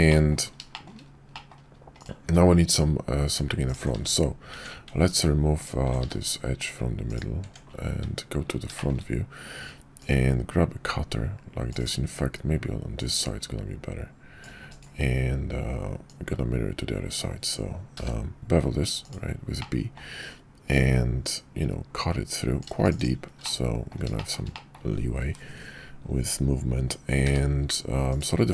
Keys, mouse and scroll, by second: 0.1 middle drag, 0.7 shift+middle click, 1.3 middle click, 2.3 Tab, 3.9 x, 4.5 Tab, 6.0 x, 7.4 Tab, 7.9 `, 8.8 shift+click, 10.4-19.2 drag, 19.7-20.0 middle drag, 23.4-23.9 middle drag, 24.2 shift+middle click, 24.5 middle click, 27.2 q.